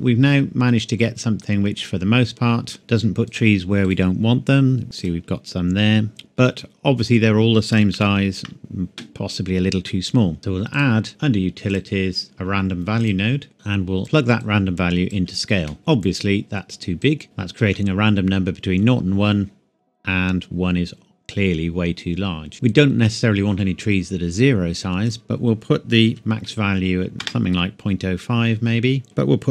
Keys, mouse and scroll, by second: 2.8-3.3 scroll up 1, 3.3 click, 3.8 right click, 5.0 click, 6.1 shift+middle click, 6.4-7.6 shift+scroll up 2, 7.9 ctrl+s, 10.4 scroll down 1, 10.7 click, 13.0 click, 17.0 click, 17.2 shift+middle click, 18.3-20.5 scroll up 2, 22.5 shift+middle click, 25.0 click, 26.1 KP_Decimal, 26.2 KP_Enter, 27.1 KP_5, 27.2 KP_Enter.